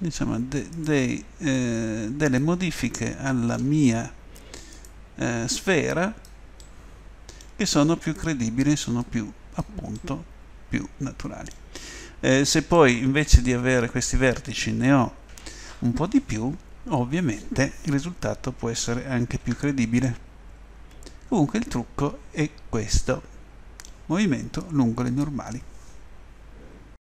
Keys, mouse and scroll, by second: 0.7 right click, 2.6 click, 2.7 middle click, 3.2 click, 4.8 right click, 6.6 middle click, 8.0 right click, 9.0 middle click, 9.7 middle click, 10.7 middle click, 11.9 middle click, 13.0 middle click, 13.7 middle click, 14.7 middle click, 15.4 middle click, 19.5 Tab, 20.0 middle drag, 20.9-21.9 middle drag, 23.3-24.1 middle drag, 25.1 click.